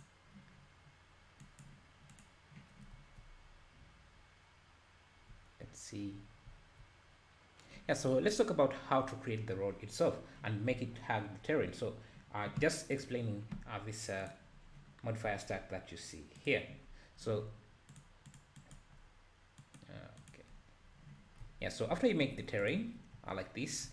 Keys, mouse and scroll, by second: 0.0 click, 1.4-3.0 drag, 3.3-4.3 scroll up 3, 6.1-6.5 scroll down 1, 6.5 `, 13.0 click, 16.8-17.6 scroll down 3, 17.6 z, 20.2 click, 21.4-22.2 scroll up 1, 22.2 h, 22.7 click, 23.1 `, 23.6 scroll down 2, 23.8 `.